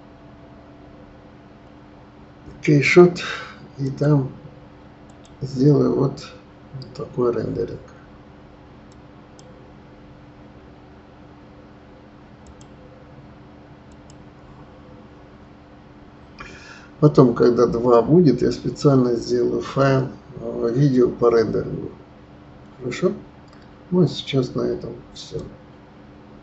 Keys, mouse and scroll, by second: 24.5-26.4 middle drag.